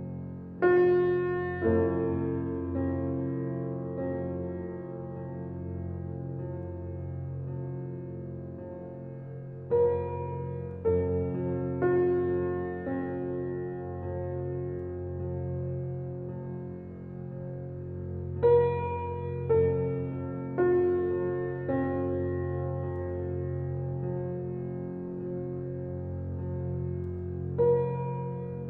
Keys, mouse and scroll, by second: 0.3 ctrl+alt+z, 0.9 alt+click, 1.7 click, 5.6 ctrl+alt+z, 6.6 alt+click, 7.2 click, 11.9 alt+click, 12.5 alt+right click, 13.0 alt+click, 16.2 alt+click, 18.1-22.1 drag, 22.1 ctrl+alt+z, 25.3 alt+click, 26.8-28.6 drag.